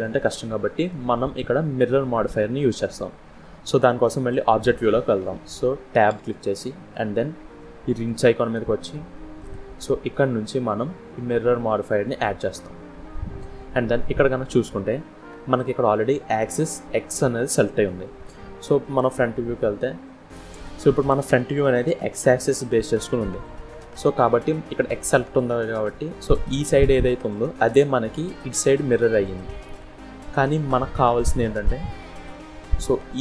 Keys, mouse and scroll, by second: 0.0 middle click, 1.1 scroll down 1, 1.2-2.0 scroll up 3, 2.0 scroll down 2, 2.5 middle click, 3.3 scroll down 1, 3.7 middle click, 4.2 scroll down 1, 6.0 Tab, 7.9 click, 9.2 click, 13.2-13.6 scroll up 1, 13.6-14.1 scroll down 1, 18.8 KP_1, 20.2-20.5 scroll down 4, 23.6-24.2 scroll up 5, 26.4 click, 28.6 click, 29.5-30.2 scroll down 2, 30.6 scroll down 1, 30.7 middle click, 31.7-32.2 scroll up 3, 32.4 middle click, 33.0 click.